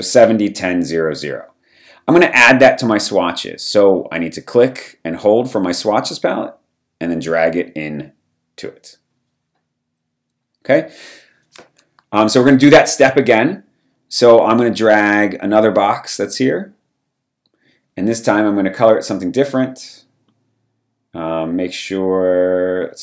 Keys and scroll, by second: 13.1 m.